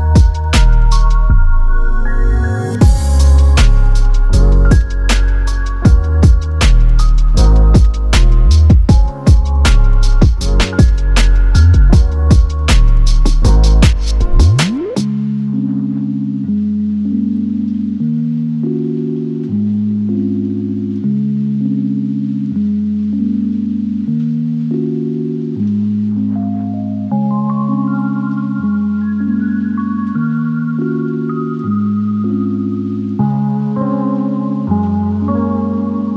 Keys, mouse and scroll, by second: 2.2 click, 2.8 click, 4.2 p, 6.0 click, 20.0 click, 33.8 click.